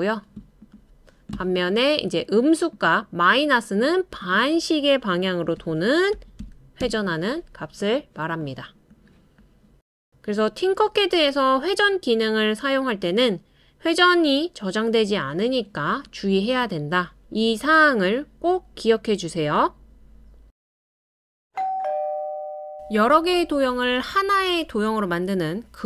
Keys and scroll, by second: 5.6-6.8 typing.